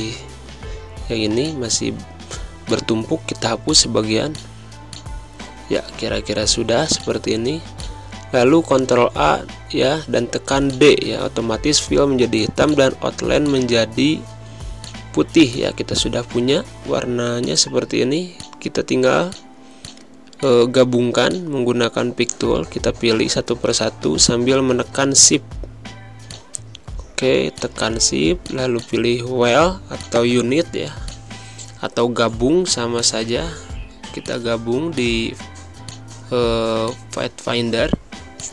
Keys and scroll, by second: 0.4 v, 1.7 Delete, 4.9 ctrl+a, 6.1 z, 7.0 space, 9.0 d, 12.5 z, 13.9 space, 16.3 v, 18.4 z, 19.7 space, 20.3 v, 34.1 space, 35.0 z, 36.2 space, 37.0 v.